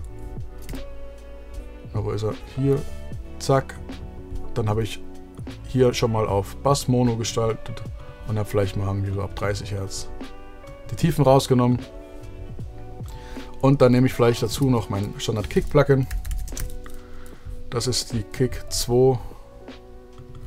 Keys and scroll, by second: 14.8 shift+super+t, 15.7 super+f, 16.1-17.3 typing.